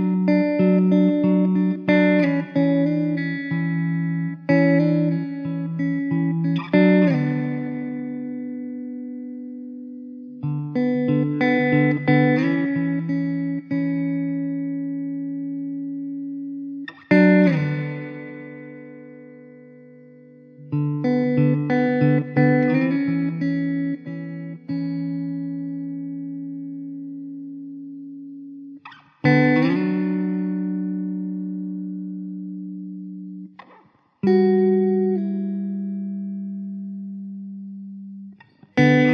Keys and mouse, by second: 0.0 middle click, 0.9 alt+w, 7.0 2, 8.5 alt+w, 9.5 alt+middle click, 11.9 2, 13.3 alt+middle click, 15.2 alt+w, 15.9 middle click, 23.6 1, 25.7 1, 26.5 alt+w, 27.8 1, 37.9 middle click.